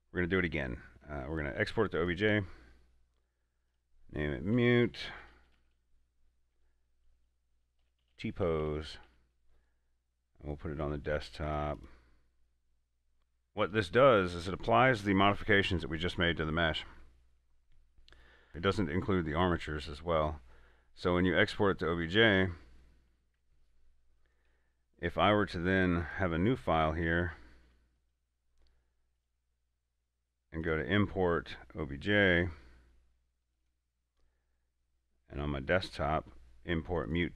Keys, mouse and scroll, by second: 2.2 click, 5.4-5.8 typing, 7.8-9.3 typing, 11.7 typing, 11.8 click, 13.2 scroll up 1, 18.5-19.0 scroll up 1, 21.2 click, 26.0 click, 27.9 x, 28.3 click, 33.7 click.